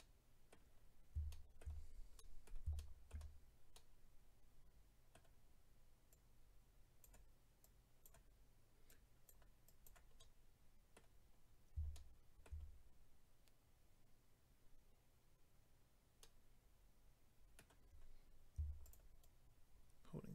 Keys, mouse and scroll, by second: 0.0 middle click, 0.8-1.3 scroll down 2, 1.3 shift+middle click, 1.6 middle click, 1.8-2.2 scroll down 2, 2.2 middle click, 2.8 shift+middle click, 3.1 middle click, 3.7 middle click, 6.1 click, 7.6 click, 8.9 click, 9.6 click, 10.2 middle click, 11.3-11.9 scroll down 2, 11.9 shift+middle click, 16.2 middle click, 17.8-18.8 scroll up 3, 18.8 shift+click, 19.2 shift+click.